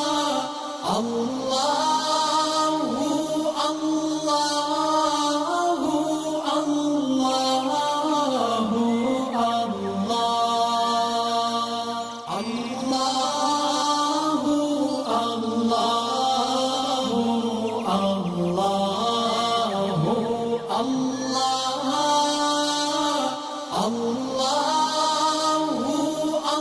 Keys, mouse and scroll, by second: 1.5 alt+scroll down 1, 1.9 click, 2.5-3.0 alt+click, 3.4 alt+scroll up 1, 4.5-5.6 alt+shift+click, 5.6-6.4 alt+scroll down 3, 6.5-7.3 alt+scroll up 2, 7.3-7.9 drag, 10.7-11.1 alt+scroll down 2, 11.3-12.4 alt+scroll up 2, 12.4-16.5 drag, 15.0-15.6 click, 15.9 click, 17.5 alt+scroll down 2, 17.9 alt+scroll up 1, 19.0-20.4 alt+drag, 20.8 click, 21.4 alt+scroll down 1, 21.9 alt+scroll up 1, 22.2 click, 22.2 click, 23.4 right click, 23.5 right click, 24.4 click, 25.1 space, 25.2-25.9 click, 25.6 space.